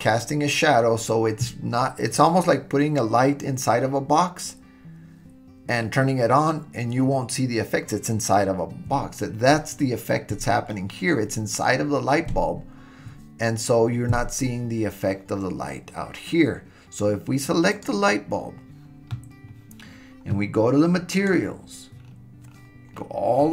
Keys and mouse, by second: 17.7 click, 21.1 click.